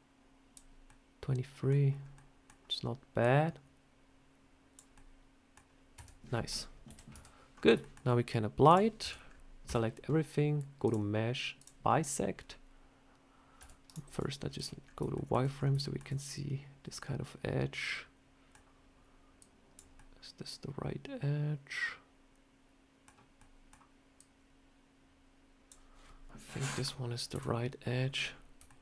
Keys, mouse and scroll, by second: 0.7 middle click, 1.9 scroll up 2, 2.0 middle click, 3.1 click, 4.8 middle click, 5.8 Tab, 6.7 KP_7, 7.0 Tab, 7.4 scroll down 4, 7.7 shift+middle click, 8.5 click, 8.9 Tab, 9.1 scroll up 2, 9.5 a, 10.7 click, 14.0 z, 14.7-15.5 scroll up 4, 15.0 shift+middle click, 15.7 shift+middle click, 16.9 middle click, 19.3 click, 19.8 middle click, 23.3 middle click, 24.0 click, 27.2 KP_7, 28.0-28.5 scroll up 3, 28.6 shift+middle click.